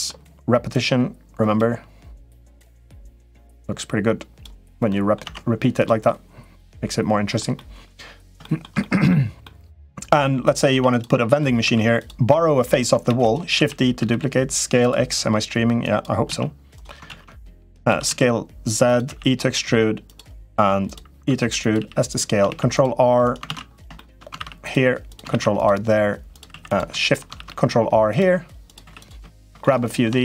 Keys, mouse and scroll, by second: 0.5 click, 2.7-4.2 drag, 4.7 middle click, 5.0 Tab, 5.8-7.1 middle drag, 7.3 middle click, 8.2 shift+middle click, 8.5 middle click, 9.2 middle click, 10.5 Tab, 10.6 click, 11.0 middle click, 11.5 3, 11.7 click, 12.8 shift+d, 13.3 s, 15.6 click, 16.0 z, 16.5 right click, 16.8 ctrl+z, 17.6 s, 18.8 e, 21.0 e, 21.5 s, 22.2 ctrl+r, 23.2 ctrl+z, 23.7 shift+middle click, 24.1 ctrl+r, 25.1 ctrl+r, 26.4 3, 26.4 click, 27.1 ctrl+r, 28.7 3, 28.7 click, 29.4 middle click.